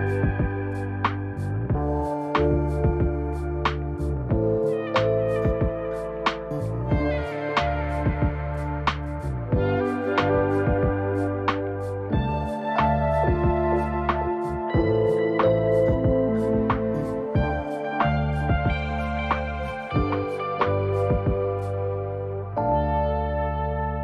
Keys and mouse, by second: 0.5 shift+middle click, 3.3 ctrl+z, 6.2 ctrl+r, 14.3 shift+middle click, 18.0 ctrl+r.